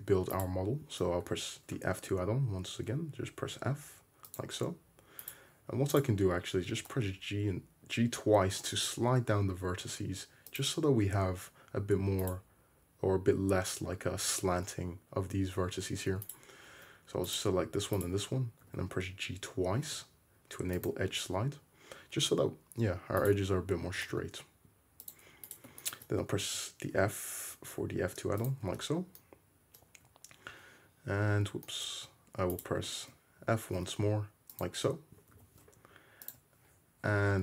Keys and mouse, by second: 0.4 click, 1.3 f, 5.3 click, 6.1-8.1 middle drag, 6.7 g, 12.3 click, 16.3-17.4 drag, 18.0 shift+middle click, 18.7 g, 21.7-23.2 middle drag, 23.3-25.5 middle drag, 24.0 g, 25.5 shift+click, 26.1-29.1 drag, 26.5 f, 28.9 `, 30.0 Escape, 30.5 Escape, 31.1 Escape, 31.7 click, 31.9 `, 33.4 f, 34.8-37.4 drag, 35.4 g.